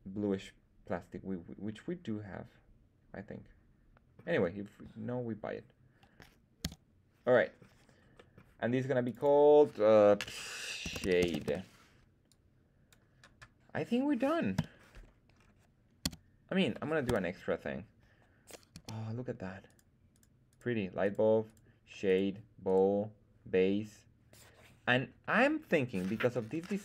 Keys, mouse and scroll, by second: 6.6 x, 7.3-7.7 middle drag, 8.1 middle drag, 9.0 click, 9.1-12.1 drag, 12.2-12.8 drag, 14.5 /, 15.3-16.0 scroll down 1, 16.0 scroll down 1, 16.0 z, 16.6 middle drag, 17.0 KP_1, 18.7 z, 19.6 right click, 20.1 right click, 20.4 right click, 21.0 right click, 21.4 click, 22.0 click, 22.0 right click, 22.6 click, 22.6 right click.